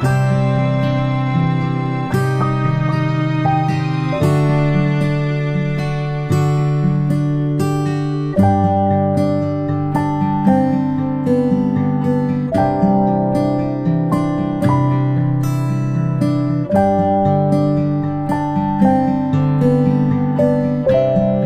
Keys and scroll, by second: 10.4 ctrl+shift+space, 10.6 ctrl+shift+space, 12.5-12.8 space, 13.3 p.